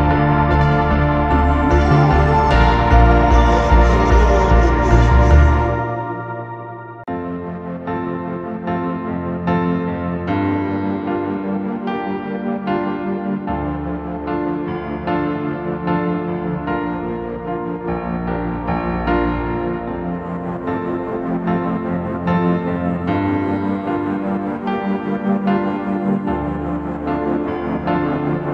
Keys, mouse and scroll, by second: 2.1 double click.